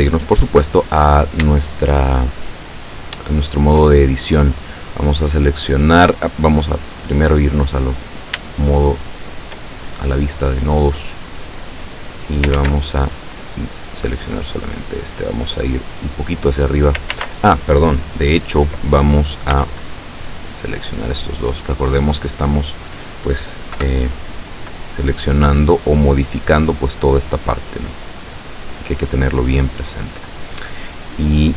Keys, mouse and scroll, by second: 0.0 Tab, 1.7-4.0 shift+middle drag, 4.9 right click, 6.9 click, 8.0-8.3 scroll up 2, 8.6-9.8 shift+drag, 10.9-12.6 drag, 12.6 ctrl+z, 13.4 right click, 14.0-16.3 drag, 17.2 ctrl+z, 19.6 b, 20.2 click, 21.2 scroll up 1, 23.8 KP_7, 25.1-28.6 drag.